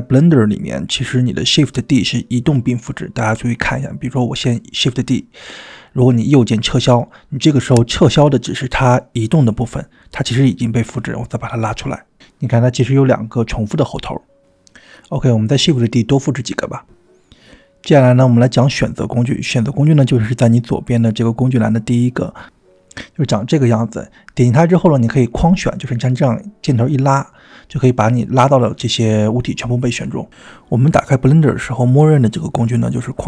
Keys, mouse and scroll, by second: 0.6 g, 1.8-2.4 scroll down 2, 2.4-3.0 middle drag, 3.8 shift+d, 9.8 click, 11.2 g, 14.3 g, 15.5 click, 15.7 shift+d, 17.1 g, 17.8 shift+d, 19.2 click, 19.3 middle click, 19.4 scroll down 2, 19.5-19.8 drag, 20.0 click, 24.0 click, 26.3-27.3 drag, 28.6 click.